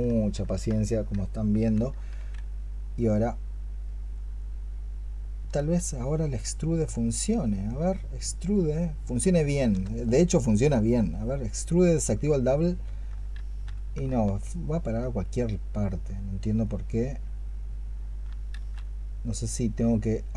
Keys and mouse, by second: 2.0 q, 5.4-9.6 space, 13.2 ctrl+z, 14.0 alt+click, 18.4 ctrl+z.